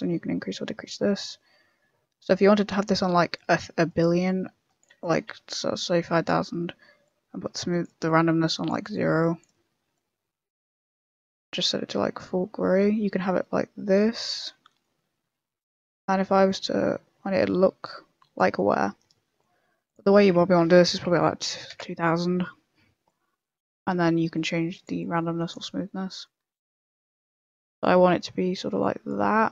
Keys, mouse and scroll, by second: 4.2 click, 5.0 click, 5.5 5, 6.1 5, 7.0 click, 8.0 click, 9.0 click, 14.8 middle click, 16.4 click, 18.5 middle click, 19.8 click, 21.2 0, 21.3 0, 23.0 click, 26.2 click, 27.7 click, 29.2 middle click.